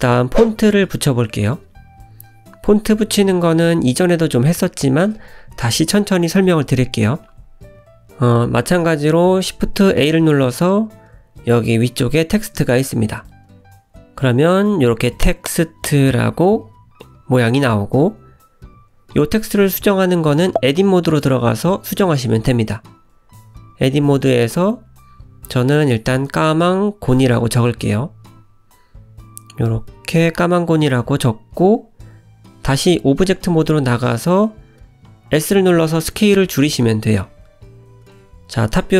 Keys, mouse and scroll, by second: 0.1 g, 1.7 click, 2.0 KP_Decimal, 2.6 click, 4.9 scroll up 1, 5.5 middle click, 6.5 click, 7.5 middle click, 7.7 shift+right click, 7.9 middle click, 9.1 shift+a, 13.9-14.5 scroll down 4, 14.8 middle click, 20.0 Tab, 20.8 BackSpace, 20.9 BackSpace, 22.0-26.0 typing, 26.9-28.7 scroll down 3, 29.0 shift+-, 30.5 shift+g, 30.7 o, 30.9 n, 31.9 scroll down 1, 33.0 i, 33.5-33.9 scroll down 1, 34.2 Tab, 34.7 s, 36.7-37.2 scroll up 4, 37.6 `, 38.8 g.